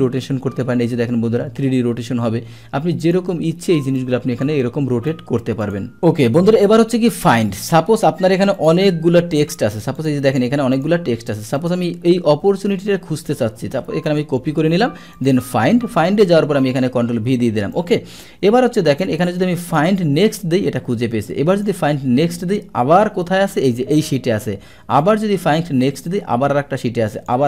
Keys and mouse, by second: 3.0 click, 4.0-5.1 drag, 5.6 click, 8.5 click, 10.0 click, 10.7 click, 11.6 click, 12.6 click, 13.9 ctrl+c, 14.1 click, 15.1 click, 17.2 ctrl+v, 17.7 ctrl+v, 17.7-18.1 drag, 19.7 click, 21.5 click, 25.0 click, 27.1 click.